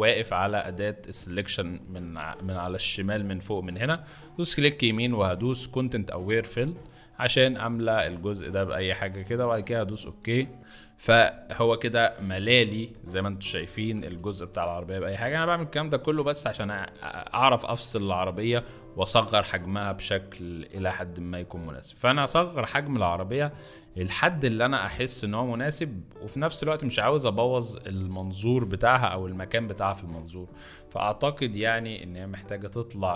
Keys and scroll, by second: 2.7 F2, 13.7 ctrl+alt+d, 19.2 ctrl+alt+t, 30.2 Return.